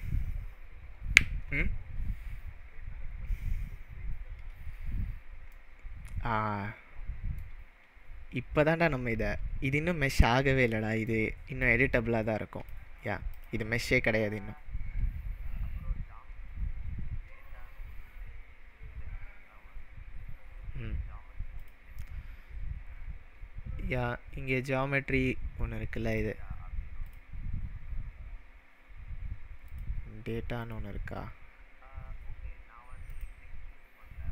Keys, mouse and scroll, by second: 5.5-7.3 middle drag, 10.1-11.3 middle drag, 11.6-12.8 drag, 13.4 click, 21.6-24.7 drag, 26.1-28.5 drag, 28.4-29.1 scroll down 2, 29.1-29.6 scroll down 1, 29.7-33.2 drag.